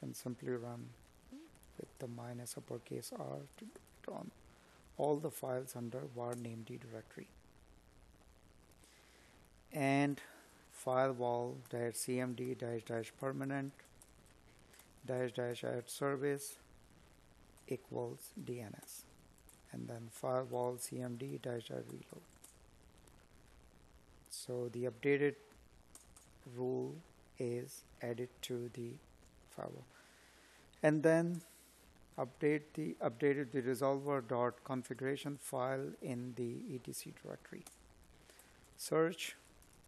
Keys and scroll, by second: 7.8 space, 9.6 space, 16.7 space, 29.5 space, 30.9 Tab, 35.3 space, 38.9 space.